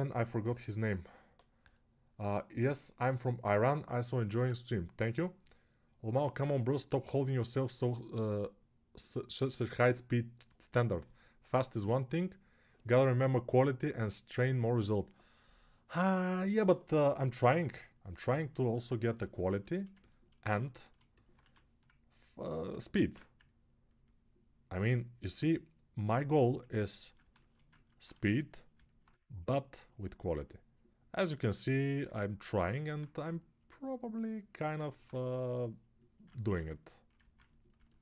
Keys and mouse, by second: 22.8 alt+q, 25.1-38.0 drag.